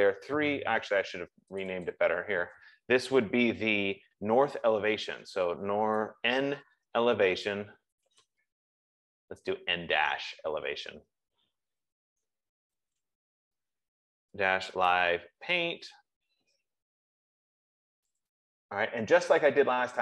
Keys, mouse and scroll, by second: 0.3 click, 2.2 click, 5.3-10.4 typing, 12.0-16.6 typing, 18.5 click.